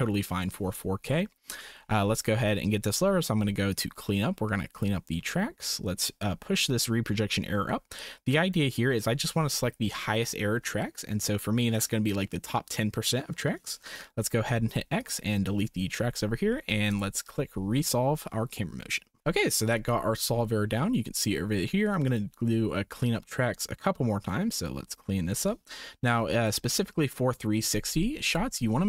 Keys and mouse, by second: 1.2 shift+click, 3.7 click, 4.8 click, 6.1-8.7 drag, 14.5 x, 17.6 click, 22.0 click, 23.1-25.3 drag, 26.1 Delete, 28.3 click.